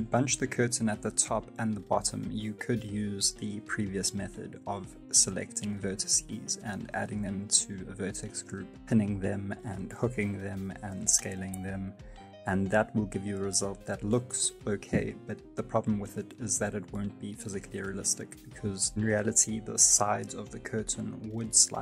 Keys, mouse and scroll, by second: 0.1 click, 1.0 middle click, 1.2 alt+click, 2.9 shift+middle click, 3.1 scroll up 3, 3.2 middle click, 3.5 Tab, 3.6 middle click, 3.8 r, 4.2 shift+middle click, 4.5 right click, 4.7 shift+right click, 4.8 scroll down 1, 5.0-5.8 ctrl+shift+KP_Add, 6.1 middle click, 6.4 shift+middle click, 6.7 click, 7.0 click, 7.4 click, 7.4 shift+middle click, 7.8 ctrl+h, 8.2 middle click, 8.5 right click, 9.4 shift+right click, 9.7-10.6 ctrl+shift+KP_Add, 10.9 click, 11.2 ctrl+h, 11.7 middle click, 11.9 shift+middle click, 12.4 Tab, 12.7 right click, 13.1 click, 13.5 click, 13.6-14.1 scroll down 6, 14.0 click, 14.7-15.5 scroll down 12, 14.9 click, 15.7 click, 16.1 space, 16.8 right click, 17.1 s, 20.5 middle click.